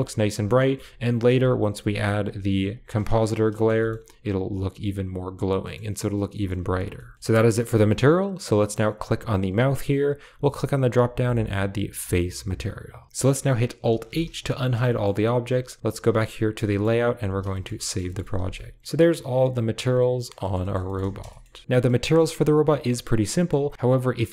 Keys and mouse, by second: 0.0-2.6 typing, 1.6 click, 3.5 click, 3.7 shift+middle click, 5.6 middle click, 6.3 shift+middle click, 6.9 shift+middle click, 8.9 click, 10.3-12.1 drag, 13.1 alt+h, 13.1 middle click, 13.1 typing, 14.1 alt+h, 14.6 a, 14.8 shift+middle click, 16.6 middle click, 17.2 ctrl+s, 17.4 shift+middle drag, 17.6 middle click, 17.9 shift+middle click, 18.3 ctrl+s, 18.4-20.2 middle drag, 20.3 shift+middle click, 20.5 middle drag, 20.7 shift+middle click, 21.0 a, 21.2 shift+middle click, 21.4 a, 21.5 middle click, 21.7-22.8 middle drag, 23.3-24.3 shift+middle drag.